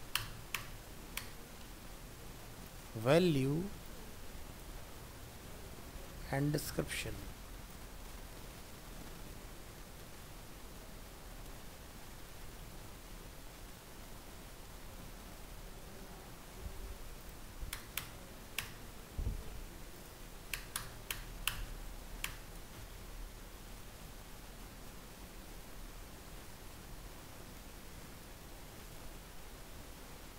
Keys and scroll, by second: 17.8 BackSpace.